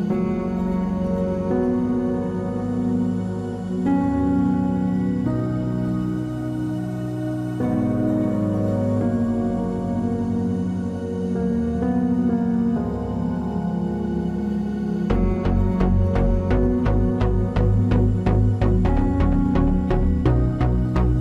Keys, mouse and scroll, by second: 1.5 click, 2.0 KP_3, 3.9 shift+space, 4.8 a, 6.2-8.1 drag, 8.6-10.6 drag, 10.4 KP_Decimal, 12.0-13.8 drag, 14.0 right click, 14.5 KP_Decimal, 15.6 b, 15.9-17.2 drag, 17.7-20.0 drag, 20.0-21.2 middle drag.